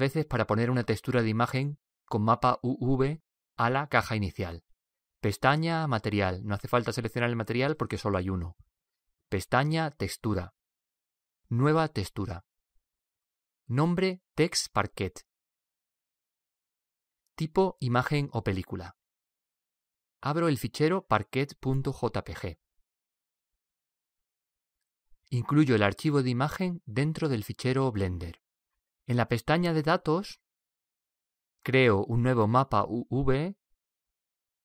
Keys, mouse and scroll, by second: 6.0 click, 8.9-15.1 drag, 23.1 click, 25.9 click, 28.8-30.6 middle drag, 30.4-34.6 drag.